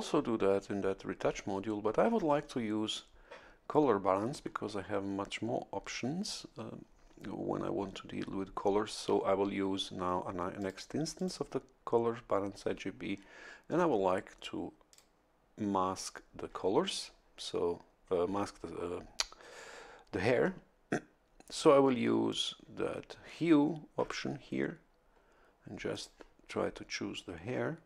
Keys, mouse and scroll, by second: 10.6 click, 11.1 click, 14.9 click, 17.7 scroll down 2, 22.3 click, 25.9 click, 27.1-27.8 drag.